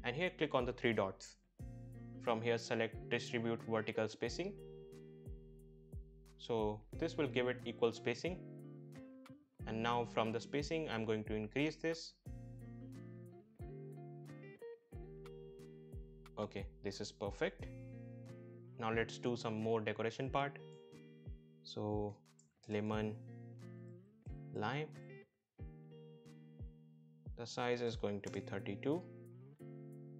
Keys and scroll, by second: 11.5 shift+Up, 12.3 shift+Up, 16.4 Up, 22.4-24.0 typing, 25.2 shift+l, 25.4 shift+i, 25.6 shift+m, 25.7 shift+e, 26.3 ctrl+a, 28.6 typing, 29.0 Return.